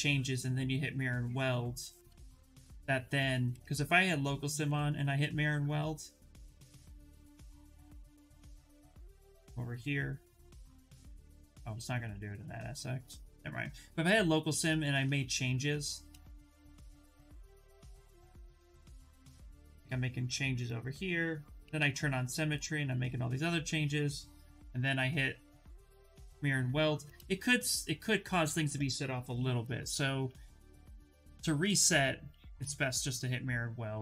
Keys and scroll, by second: 2.0 2, 4.3 2, 9.3 2, 11.3 ctrl+z, 11.5 ctrl+z, 11.7 ctrl+z, 13.0 ctrl+z, 15.4-18.3 typing, 21.3 x, 24.8 2.